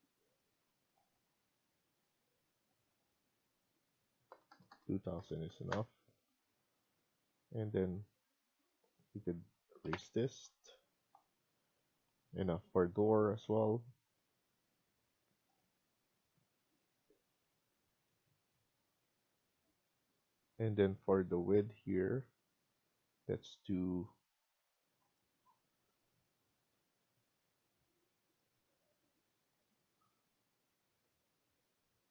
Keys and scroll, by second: 5.2-6.0 typing, 6.5 Escape, 6.7 Escape, 7.9 Escape, 9.7 Delete, 10.2 Escape, 24.2 Escape, 24.5 Escape.